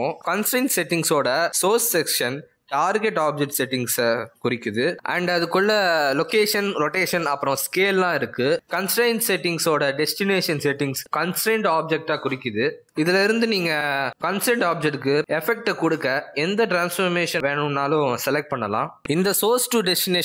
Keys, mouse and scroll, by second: 0.1-0.7 scroll down 4, 1.5-2.4 scroll up 3, 7.2 click, 7.8 click, 8.5 click, 9.1 click, 12.6 click, 13.5 click, 14.8 click, 16.4-17.4 scroll down 4.